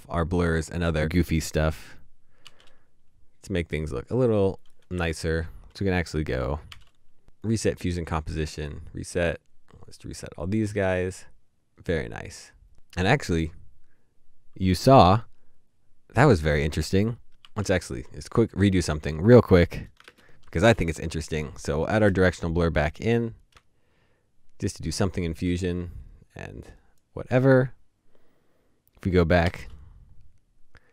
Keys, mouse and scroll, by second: 1.6 right click, 2.4 typing, 6.0 typing, 6.5 right click, 17.5 typing, 20.0 ctrl+space, 21.9 Return, 30.2 typing.